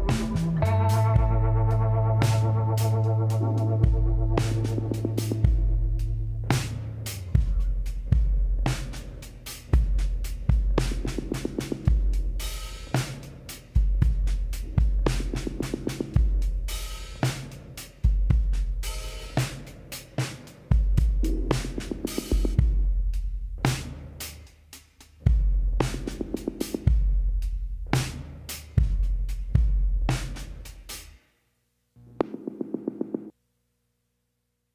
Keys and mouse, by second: 1.8 click, 4.4 KP_1, 8.6 KP_1, 10.4 shift+a, 13.3 s, 17.2 t, 18.6 s, 23.7-25.4 drag, 27.0 s, 34.0 z, 34.4-34.7 drag.